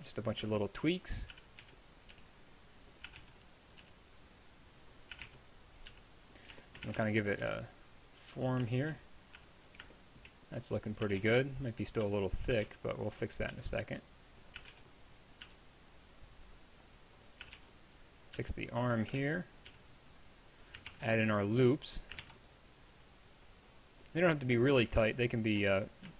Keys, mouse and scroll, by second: 0.0-3.8 typing, 5.2-7.4 typing, 9.4 a, 11.1-13.5 typing, 14.6 a, 15.3 b, 15.5 g, 17.5-19.7 typing, 20.9 ctrl+r.